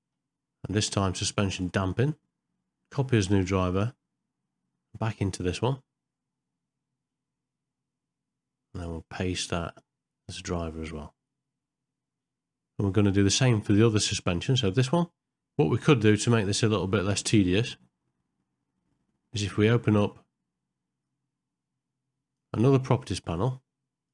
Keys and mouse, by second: 1.6-3.9 right drag, 8.7-10.6 right drag, 14.6 click, 21.1-22.4 drag, 22.8-24.1 drag.